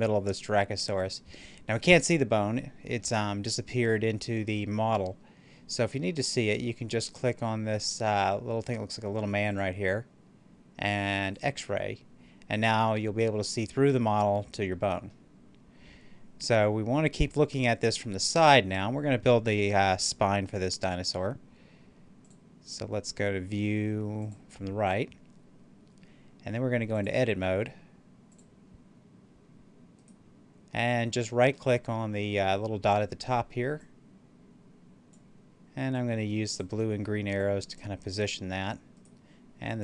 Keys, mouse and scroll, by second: 2.9-7.1 middle drag, 9.4 click, 13.1-17.3 middle drag, 22.1 click, 26.8 click, 29.9 right click, 33.7-38.9 drag, 38.9 right click.